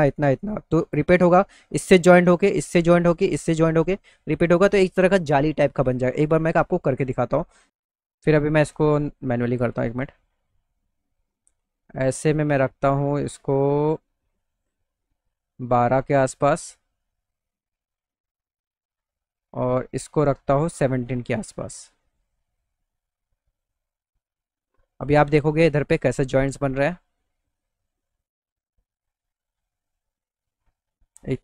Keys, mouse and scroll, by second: 10.4 middle click, 12.6-16.5 drag, 20.1-25.0 drag, 26.2 middle click, 27.2 middle click, 27.5 middle click, 28.1 middle click, 28.6-29.6 middle drag.